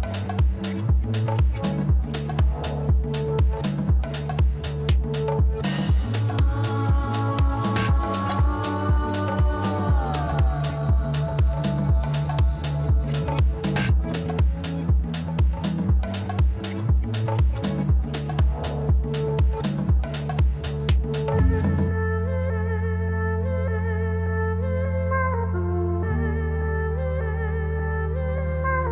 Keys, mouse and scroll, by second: 2.6 Tab, 2.8-3.1 scroll down 3, 3.1-6.2 middle drag, 8.6-9.3 scroll up 4, 9.3-10.2 middle drag, 10.2 Tab, 11.5 click, 12.9 shift+click, 13.8 shift+click, 14.6 shift+click, 15.4-17.8 middle drag, 17.8 shift+click, 18.9 shift+click, 20.2 shift+click, 21.0 middle click, 21.9 shift+click, 23.0-23.7 scroll down 2, 23.7 KP_1, 24.5-26.2 scroll up 2, 26.2 s, 28.8 Tab.